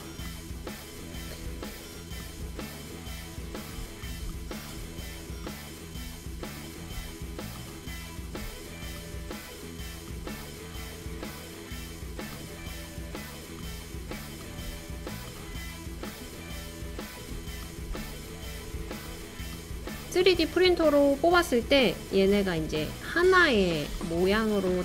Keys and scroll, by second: 8.3-9.1 typing, 10.9-11.7 typing, 13.0-16.8 typing.